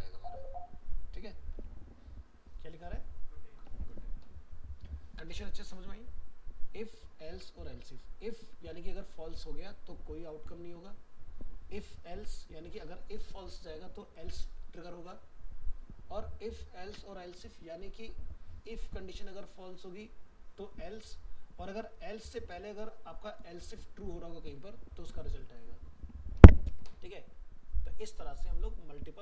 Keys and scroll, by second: 1.6 alt+Tab.